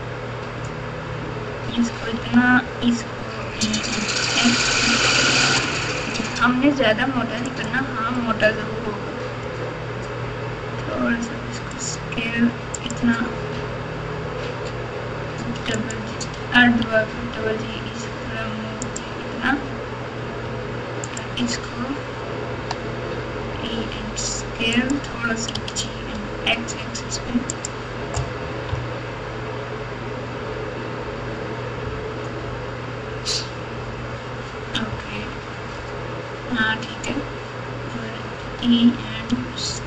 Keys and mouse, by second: 2.1 e, 10.9 s, 17.1 g, 21.0 alt+click, 22.5 e, 25.5 g, 28.7 KP_3, 35.1 KP_1.